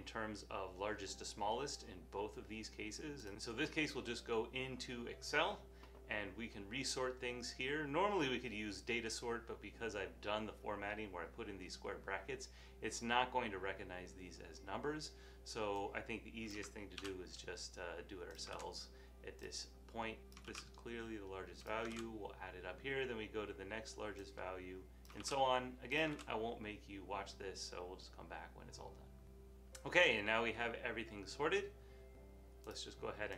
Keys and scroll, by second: 3.3 super+z, 17.1 super+x, 20.6 super+x, 22.2 super+v, 25.3 super+x.